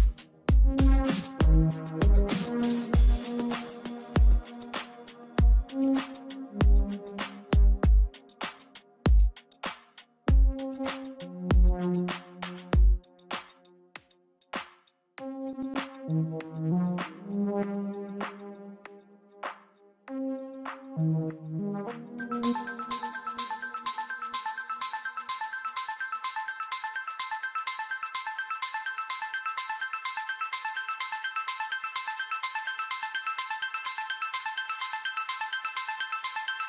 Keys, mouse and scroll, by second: 0.2 shift+click, 0.6 shift+click, 1.1 shift+click, 1.3-4.1 middle drag, 4.1 ctrl+j, 6.4 scroll up 1, 7.2 click, 7.9 shift+drag, 8.2 shift+drag, 8.6 shift+click, 8.9 shift+click, 9.4 shift+click, 9.8 shift+click, 10.2 shift+click, 12.2 ctrl+j, 13.8 scroll down 2, 15.0 shift+click, 15.9 scroll down 1, 16.2-19.3 middle drag, 22.8 shift+d, 31.0-36.0 drag.